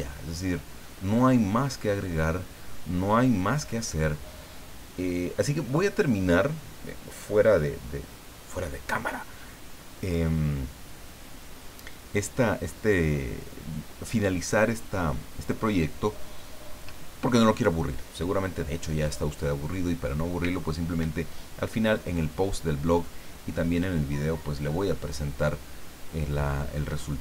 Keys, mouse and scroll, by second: 1.0-1.4 scroll down 2, 2.0 scroll down 2.